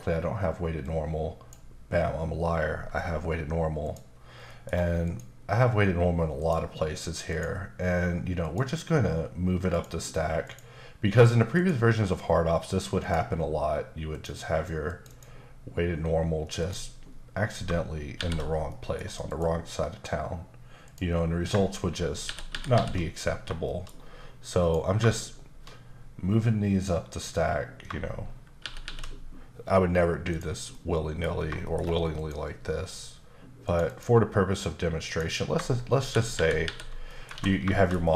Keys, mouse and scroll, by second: 3.8 click, 4.4 scroll up 1, 4.5 middle click, 5.0 click, 6.4 click, 7.3 click, 8.4 click, 9.7 click, 11.5 click, 13.0 click, 14.1 click, 14.8 click, 15.1 double click, 16.6 click, 18.1 shift+r, 18.7 middle click, 19.2 click, 20.8 click, 22.2 shift+r, 22.5 shift+r, 22.7 shift+r, 23.6 shift+middle click, 24.6 click, 27.1 click, 28.6 shift+r, 28.8 shift+r, 30.3 click, 30.7 middle click, 31.3 scroll down 1, 31.6 shift+middle click, 32.1 click, 33.6 click, 33.8 double click, 35.0 click, 35.9 shift+r, 36.6 shift+r, 37.1 middle click, 37.3 alt+a, 37.7 shift+middle click.